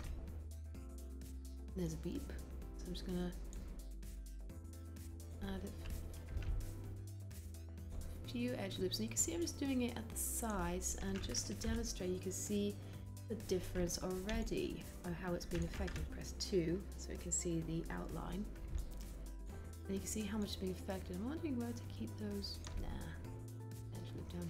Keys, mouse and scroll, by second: 11.7 3, 16.1 2.